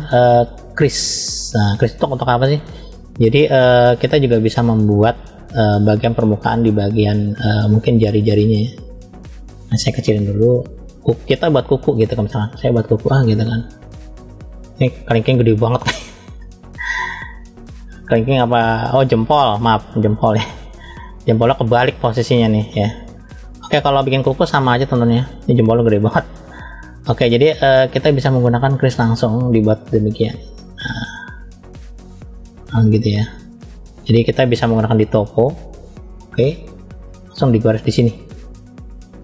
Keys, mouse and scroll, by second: 1.3 click, 3.3 click, 5.0-6.5 drag, 7.2 scroll up 1, 7.8 middle click, 7.8 scroll up 1, 8.5-8.9 scroll down 2, 10.0 f, 12.3-15.7 middle drag, 16.2-16.9 scroll down 2, 16.9-18.1 middle drag, 18.5-20.6 middle drag, 21.1 middle click, 22.5 scroll up 1, 24.1 shift+middle click, 24.1 scroll up 3, 24.9 middle click, 26.3-26.8 scroll up 2, 26.8 middle click, 27.5-27.9 scroll down 2, 30.3 click, 32.2 click, 33.8-34.7 scroll up 1, 34.7-36.3 drag, 37.4-38.9 middle drag.